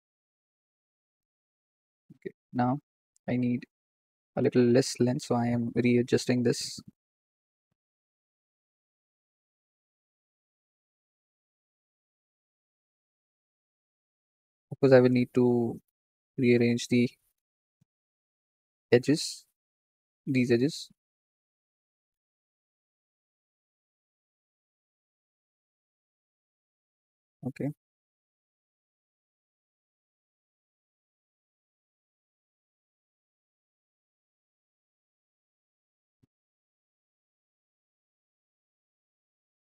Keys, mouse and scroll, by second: 2.0-3.3 scroll down 3, 3.3 click, 4.7 g, 7.0 ctrl+click, 8.0 s, 10.1 g, 11.8 ctrl+click, 12.2 ctrl+click, 12.8 g, 14.6 ctrl+click, 15.1 ctrl+click, 15.6 g, 17.7-18.2 scroll up 6, 18.5-20.4 shift+middle drag, 20.4-20.8 scroll down 5, 21.2 click, 22.0-22.5 scroll up 7, 23.4 g, 25.3 s, 27.2-27.7 scroll down 1, 29.0-30.0 scroll down 5, 30.0 shift+middle click, 30.6 click, 31.3-31.8 scroll up 5, 31.8-33.1 shift+middle drag, 33.1 s, 33.1 s, 36.7-37.3 scroll down 5, 37.3 shift+middle click, 38.0 click, 39.3-39.6 scroll up 1.